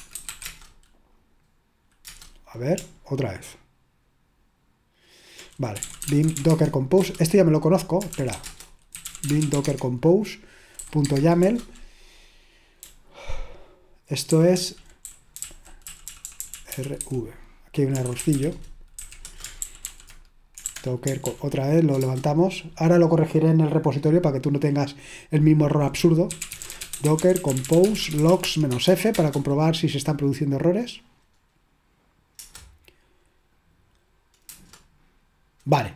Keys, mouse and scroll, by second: 0.0-0.7 typing, 2.1 Return, 5.5-11.8 typing, 12.9-17.0 typing, 18.1-20.7 typing, 19.2 Return, 21.2 ctrl+p, 22.0 Return, 26.1-29.6 typing, 32.4 Return, 34.6 Return.